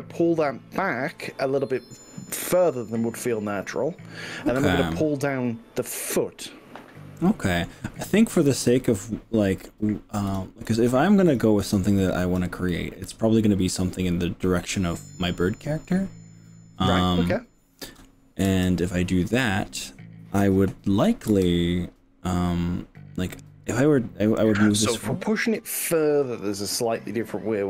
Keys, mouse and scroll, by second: 0.4-3.2 middle drag, 3.6-6.7 middle drag, 7.3-7.8 middle drag, 8.8-9.8 middle drag, 10.8 click, 11.7-12.5 drag, 12.7-17.9 middle drag, 17.9 click, 18.5 g, 21.4 y.